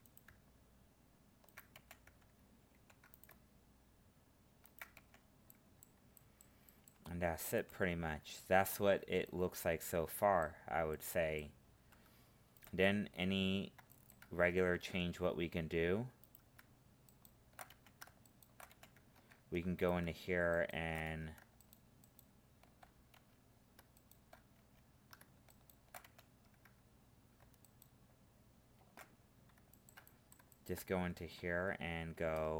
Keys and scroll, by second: 14.7 ctrl+Tab, 19.1 ctrl+Tab.